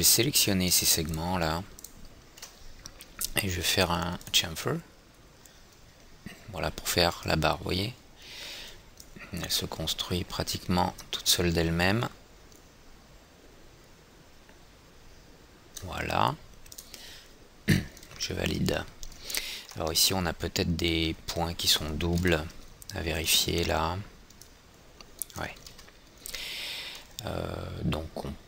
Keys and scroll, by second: 22.7 &, 26.1 ctrl+z.